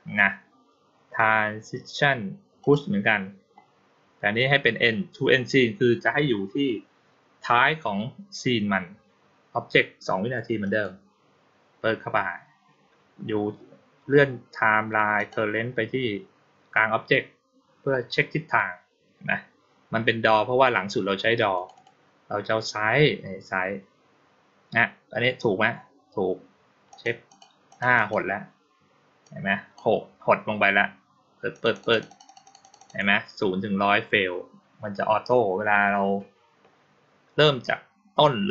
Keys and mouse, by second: 2.5 click, 10.5 click, 15.0 click, 21.4 click, 21.6 click, 26.8 click, 27.1 click, 27.5 click, 27.8 click, 29.1-29.6 drag, 31.4 click, 31.6 click, 31.8 click, 31.9 click, 32.1 click, 32.3 click, 32.5 click, 32.6 click.